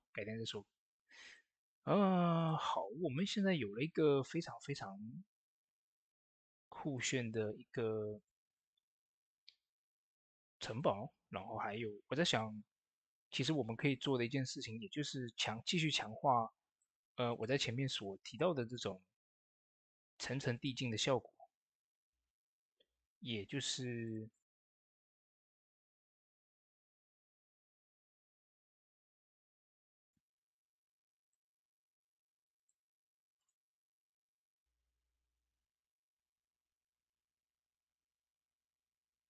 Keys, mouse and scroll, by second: 1.1-10.5 drag, 11.3 ctrl+s, 12.1 click, 15.1 click, 15.1 click, 15.7 shift+middle click, 16.6 click, 21.1 ctrl+z, 21.9 shift+d, 28.1 z, 29.1 click, 35.0 ctrl+t.